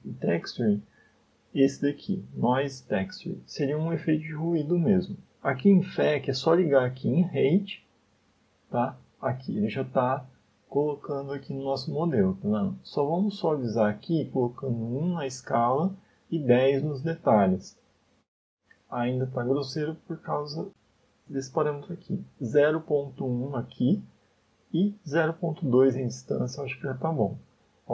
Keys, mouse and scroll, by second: 7.0 click, 9.7-10.2 scroll down 2, 10.2 middle click, 11.0 scroll up 2, 11.4 middle click, 13.9 click, 16.0 click, 18.7 middle click, 22.0 click, 25.8 click.